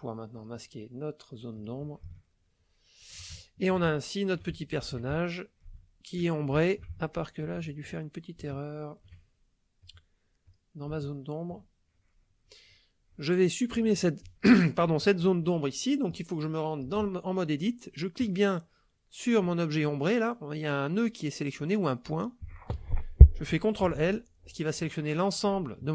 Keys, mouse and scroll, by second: 0.3 click, 1.6 click, 2.1-3.3 ctrl+drag, 3.4 ctrl+shift+click, 4.2 ctrl+shift+middle click, 4.6 ctrl+shift+click, 5.2 ctrl+shift+click, 5.8 ctrl+shift+click, 6.6-8.0 ctrl+shift+drag, 8.5 shift+click, 9.8 click, 10.4 click, 11.0 shift+click, 16.0 click, 18.2 click, 23.9 ctrl+l.